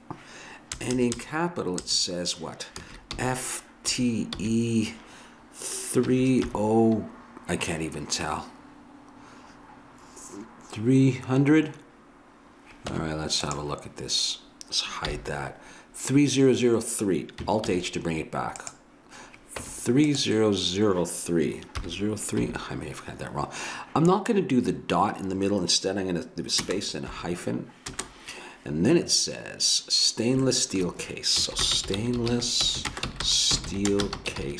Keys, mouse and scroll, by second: 0.8 BackSpace, 0.9 BackSpace, 1.2 BackSpace, 1.8 BackSpace, 3.1 f, 3.9 t, 4.4 t, 4.4 e, 6.0 3, 6.5 0, 13.0 Tab, 15.1 h, 17.6 alt+h, 18.6 click, 19.6 Tab, 21.8 0, 22.4 3, 26.6 space, 27.1 -, 27.9 space, 31.4-34.5 typing.